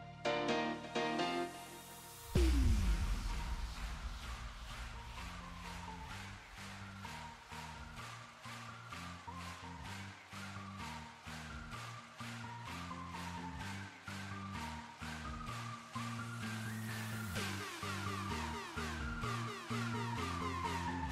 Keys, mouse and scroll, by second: 1.1 click, 1.3 KP_0, 1.6 middle click, 2.2-2.5 scroll down 4, 2.5 click, 2.7-3.7 drag, 4.4 click, 4.6 click, 5.2 KP_7, 5.6 shift+d, 6.4 s, 6.9-7.4 middle drag, 7.4 r, 8.3 alt+r, 10.1 ctrl+z, 10.4 r, 11.2 r, 12.8-13.2 middle drag, 13.2 shift+a, 13.7 alt+g, 13.8 alt+r, 14.1 click, 14.3-16.3 drag, 16.3 click, 16.5-17.7 drag, 18.3 s, 18.8 ctrl+KP_0, 19.3 click, 19.7 KP_0, 20.1 click, 20.2 Tab, 20.5 click, 20.9 Tab.